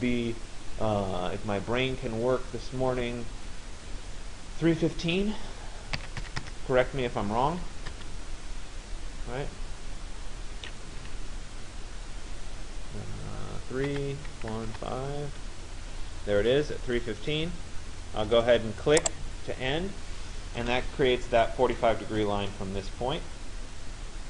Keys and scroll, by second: 5.7 3, 8.0 Return, 11.1 Tab, 13.9 3, 15.3 Tab, 20.3 Return.